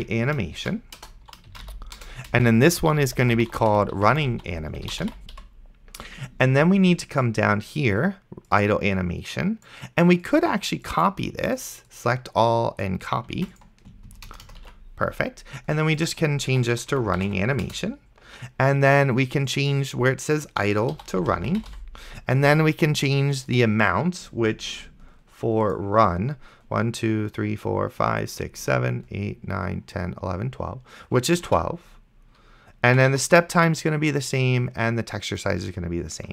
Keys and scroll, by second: 0.0-5.9 typing, 13.7 ctrl+c, 14.3 Return, 14.9 ctrl+v, 16.3-17.8 typing, 20.9-22.4 typing, 31.8 ctrl+w, 32.7-33.7 typing.